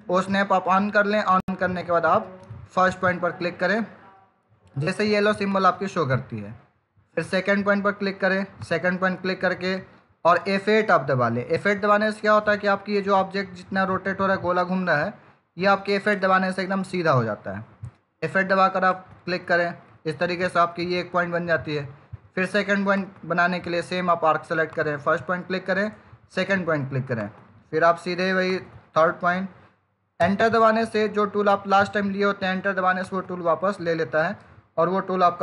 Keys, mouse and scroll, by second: 5.3 click, 8.4 click, 11.3 F8, 16.7 F8, 18.7 click, 22.8 click, 30.1 Return, 32.9 click.